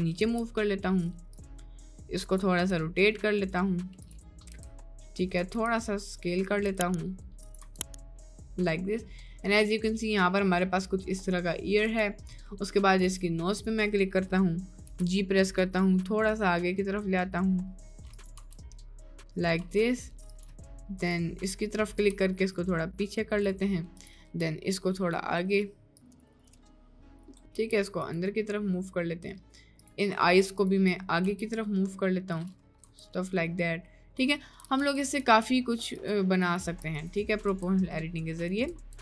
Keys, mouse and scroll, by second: 0.4 g, 2.2 click, 2.7 r, 4.5 s, 5.7 s, 6.7 s, 7.7 Tab, 8.1-11.7 middle drag, 11.9 Tab, 12.2 middle click, 14.0 middle click, 15.0 g, 18.4 Tab, 18.8 middle click, 19.8 Tab, 20.4 click, 21.6 middle click, 22.1 g, 24.6 g, 26.2 g, 26.6 g, 27.3 middle click, 27.7 g, 28.5 middle click, 30.6 shift+click, 31.0 middle click, 31.3 g, 33.0 Tab, 33.2-34.3 middle drag, 34.8 g, 35.0 Tab, 35.3 g, 36.8 g, 37.6 Tab, 37.8-38.6 middle drag, 38.7 Tab, 38.9 Tab.